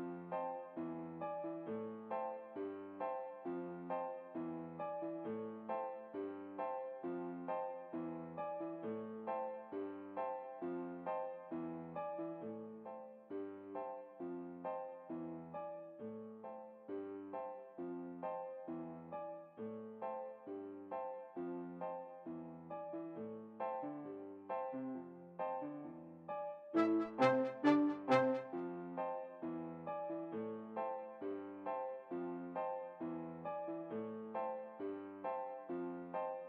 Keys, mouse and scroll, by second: 18.4 Escape, 23.5-24.8 middle drag, 25.7-27.2 right drag, 26.4-27.8 middle drag, 27.9 v, 29.7-32.3 middle drag, 30.5-31.9 right drag, 32.3 r.